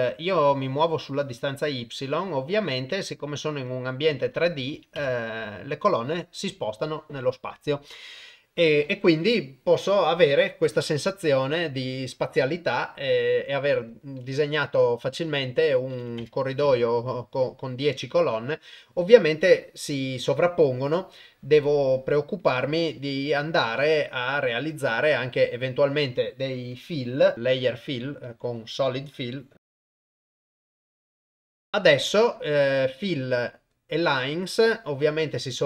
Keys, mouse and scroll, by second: 0.4-1.5 drag, 2.2 click, 2.5 click, 2.9 click, 4.1 click, 13.7-16.2 drag, 27.3 y, 27.3 u, 29.3-31.2 drag, 31.3 click.